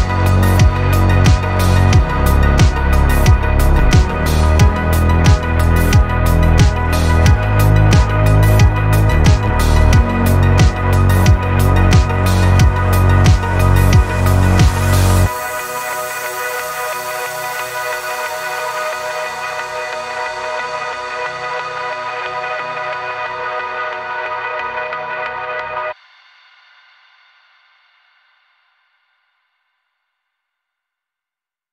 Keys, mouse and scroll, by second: 1.4 click, 1.9 click, 3.4 -, 4.0 click, 6.6-7.7 drag, 7.7 middle click, 8.9 click, 9.4 middle click, 12.3 click, 16.3 click, 19.5 click, 23.0 click, 24.7 click, 26.0 click, 26.7 click, 27.2 click, 27.7 click, 29.5 middle click.